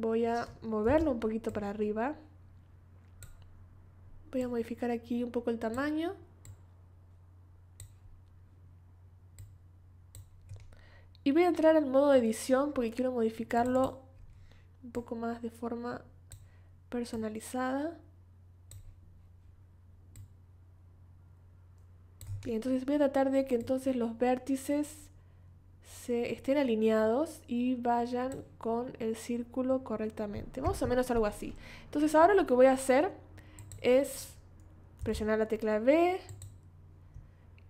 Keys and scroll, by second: 0.8 v, 35.0 v.